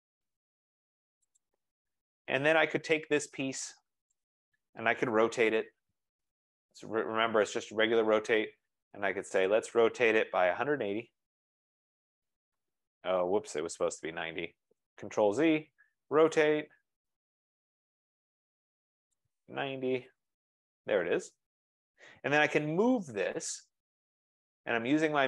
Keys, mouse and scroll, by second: 1.5 click, 2.6 Escape, 4.3 click, 5.0-6.3 typing, 6.8 Return, 7.8-8.4 scroll, 9.6 click, 10.1-11.8 typing, 12.2 Return, 15.1 typing, 15.3 ctrl+z, 16.2-17.4 typing, 19.0-20.5 typing, 19.3 click, 21.3-21.6 scroll, 21.5 Return, 22.2-23.6 typing, 22.4 Return, 24.4-24.9 scroll.